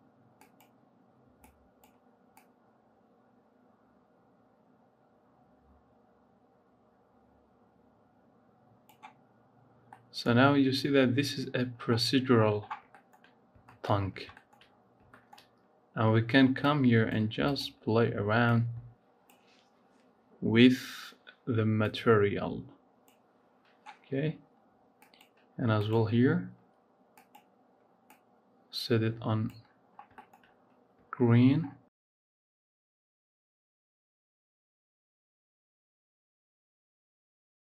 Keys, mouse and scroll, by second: 9.5 scroll up 2, 9.7-10.8 middle drag, 10.8-12.2 scroll down 2, 12.2-12.9 scroll down 10, 12.9 shift+middle click, 13.1-13.5 scroll up 4, 13.5 shift+middle click, 14.0 scroll down 5, 14.2 shift+middle click, 14.6-15.1 scroll up 3, 15.1 shift+middle click, 15.3-16.5 scroll up 1, 16.5-17.5 drag, 23.9-24.9 scroll down 3, 24.9 click, 29.7-30.1 scroll down 5, 30.1 shift+middle click, 30.3-31.5 scroll up 8, 31.5-31.9 scroll down 10, 32.1 shift+middle click, 33.0 click, 33.9 click, 34.8 scroll up 2, 34.9 shift+middle click, 35.7 click, 37.3 ctrl+z, 37.6 scroll down 1.